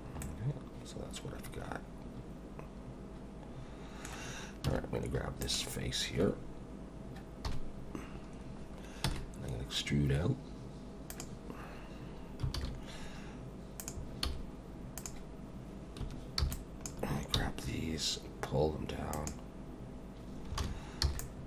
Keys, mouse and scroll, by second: 0.2 middle click, 4.7 3, 5.4 click, 7.5 KP_1, 8.4 scroll up 1, 9.0 e, 12.6 alt+a, 13.8 click, 14.3 z, 16.0 1, 16.4 b, 17.4 g, 20.6 alt+a, 21.0 b.